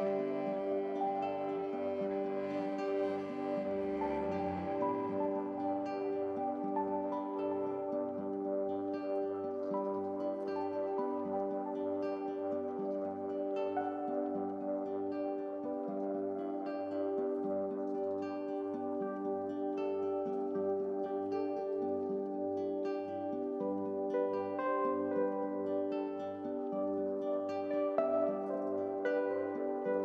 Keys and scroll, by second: 21.2 ctrl+u.